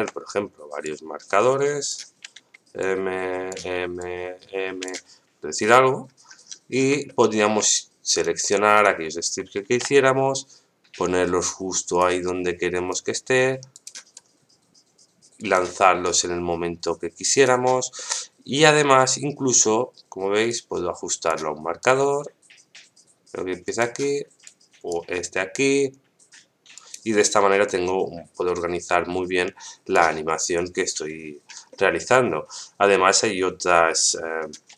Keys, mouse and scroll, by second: 0.8-1.9 drag, 2.2 m, 2.8-3.5 drag, 3.5 m, 4.0 click, 5.8-6.2 scroll down 2, 6.4-6.9 scroll down 10, 7.0 shift+middle click, 8.1 right click, 8.7 shift+right click, 9.6 shift+d, 12.9 right click, 14.1-15.5 right drag, 16.0-17.4 right drag, 17.9 middle click, 18.9-19.7 scroll up 4, 20.3 scroll up 1, 20.5-21.3 drag, 21.8-23.8 right drag, 24.4 click, 25.5-26.7 right drag, 27.7-29.9 drag, 30.2 middle click, 31.7 middle click, 33.9 click.